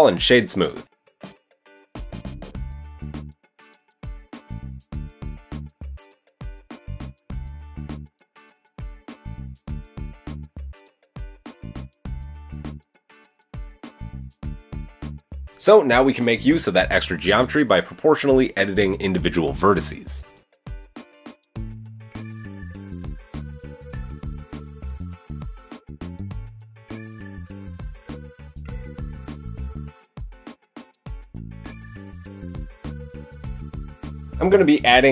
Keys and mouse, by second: 0.5-9.4 drag, 1.9 Tab, 2.1 KP_1, 2.9 g, 5.7 KP_1, 8.4 shift+s, 9.4-10.8 shift+middle drag, 10.7 KP_1, 10.8 Tab, 10.8-12.0 shift+drag, 13.0 KP_3, 14.0 Tab, 14.5 Tab, 16.6 click, 17.0 shift+click, 17.2-20.6 shift+middle drag, 19.2 KP_1, 20.6 click, 20.8-23.4 middle drag, 23.4-31.1 drag, 25.9 g, 31.1-32.3 middle drag, 31.1 KP_3, 31.6 Tab, 32.4-34.1 middle drag, 33.3 KP_1, 34.1-35.1 drag.